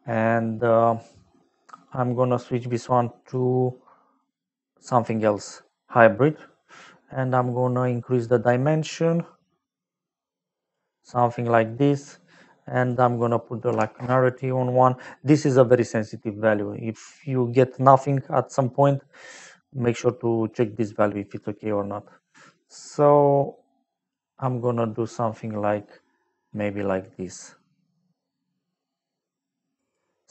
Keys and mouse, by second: 3.2 click, 4.1 click, 8.2 click, 12.8 click, 13.7 KP_1, 13.9 Return, 18.2 click, 22.0 click, 25.6 click.